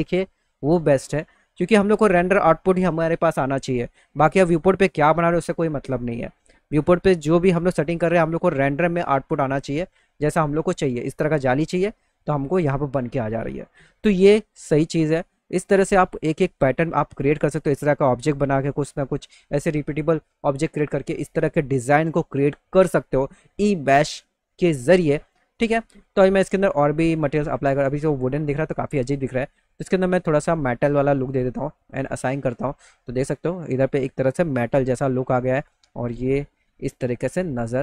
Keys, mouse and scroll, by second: 9.3 middle click, 14.6-16.5 middle drag, 26.1 middle click, 27.9 click, 29.0 click, 29.8 click, 31.7 click, 35.0-36.6 alt+middle drag, 37.0 middle click.